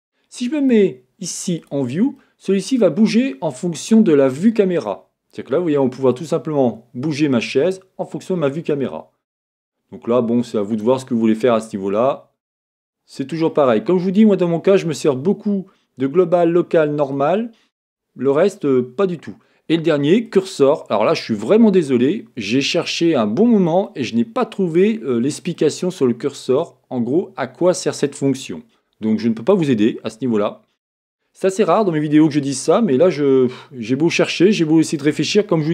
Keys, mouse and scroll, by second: 0.6-2.2 drag, 2.2-6.2 middle drag, 6.2-11.3 drag, 11.5 middle click, 11.8 middle click, 12.2 middle click, 12.6 middle click, 21.3-29.5 middle drag, 25.0-25.5 scroll, 30.1-30.5 scroll down 1, 30.5-31.8 scroll up 1, 31.8 scroll up 1, 31.8-35.7 middle drag.